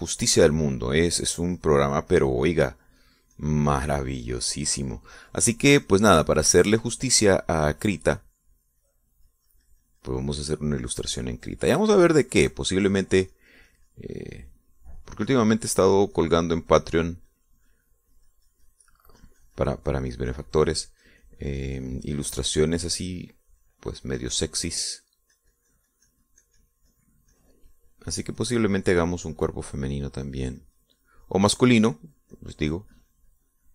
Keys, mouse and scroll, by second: 2.7-10.7 drag, 21.6-28.7 drag, 28.8-31.4 drag, 31.5-33.7 drag.